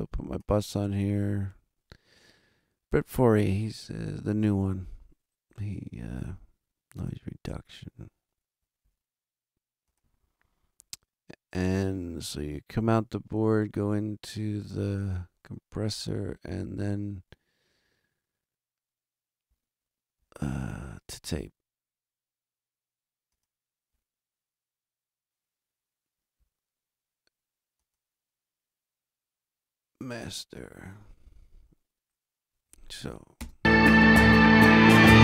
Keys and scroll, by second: 33.3 space.